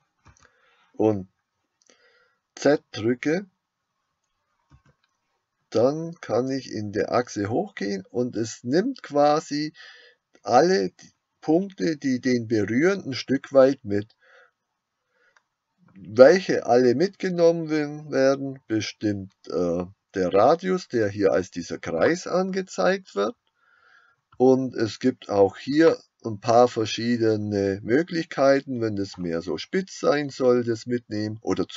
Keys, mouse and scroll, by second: 0.3 g.